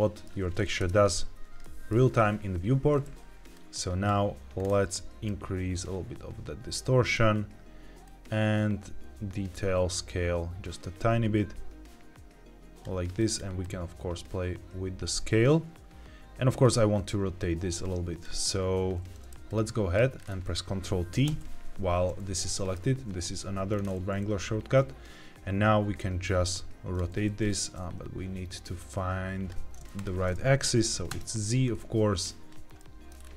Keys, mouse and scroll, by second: 0.7 KP_0, 1.5 shift+middle click, 3.5 click, 4.5-4.8 scroll up 2, 5.2-7.1 drag, 5.2 scroll up 1, 7.9-12.8 drag, 13.1 click, 13.5-18.1 drag, 19.4 click, 20.1-21.2 scroll down 4, 21.2 ctrl+t, 22.4 middle click, 22.7-23.5 scroll down 1, 23.6-24.2 scroll up 2, 25.4-25.8 scroll up 1, 25.9-26.9 drag, 27.2 ctrl+z, 27.5-29.5 drag, 29.9-31.0 drag, 32.5 click, 32.7 middle click, 33.0-33.3 scroll down 2.